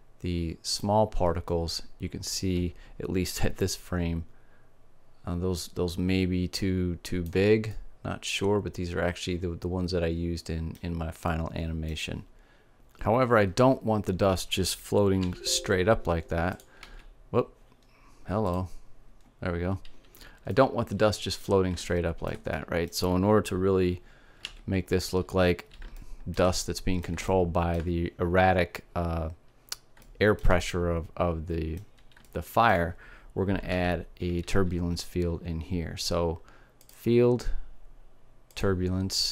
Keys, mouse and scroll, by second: 1.3-4.1 drag, 2.2 middle click, 4.2-5.6 drag, 5.6 right click, 8.3-10.2 middle drag, 11.9 middle click, 12.7 click, 19.2 alt+a, 21.2 middle click, 25.1 alt+a, 29.9 middle click, 31.4-34.8 middle drag, 34.3 shift+a.